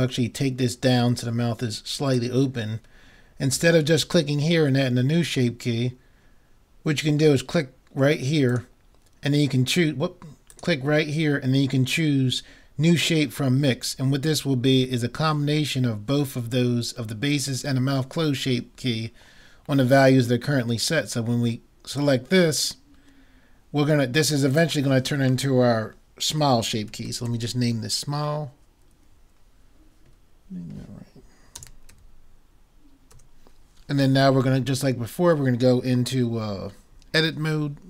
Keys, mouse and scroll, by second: 1.2 middle click, 8.5-10.3 drag, 10.6-12.4 drag, 24.5-26.3 drag.